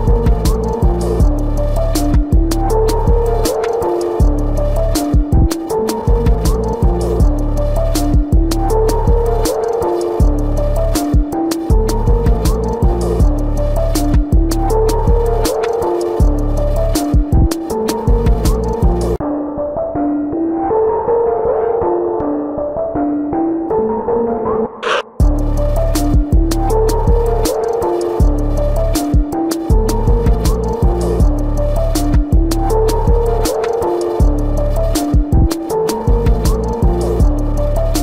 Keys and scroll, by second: 4.2 space, 6.7 space, 11.1 ctrl+=, 11.5 ctrl+=, 12.2 space, 12.7 ctrl+alt+z, 14.9 space, 16.4 space, 22.9 ctrl+alt+z, 25.8 space, 32.2 space, 33.9 space, 35.0 space, 36.5 space.